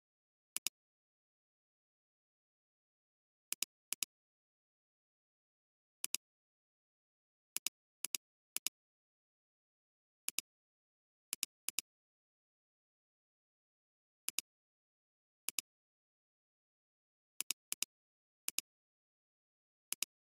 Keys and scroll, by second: 0.5 alt+space, 1.5 alt+space, 7.9 space, 11.6 space, 17.7 alt+space, 19.1 alt+space, 19.9 alt+space.